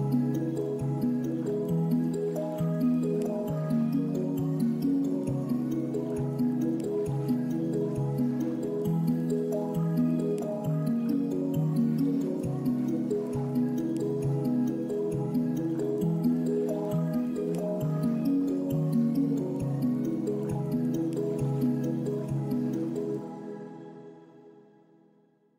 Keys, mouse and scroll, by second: 2.5-2.9 drag, 4.0-4.6 middle drag, 6.5 shift+d, 7.2 click, 8.6 middle click, 10.6-11.9 middle drag, 13.0 middle click, 13.7 click, 16.1 click, 17.2 click, 20.1 drag, 20.5 ctrl+s, 21.1-21.5 middle drag, 21.9 middle drag, 22.6-24.4 middle drag.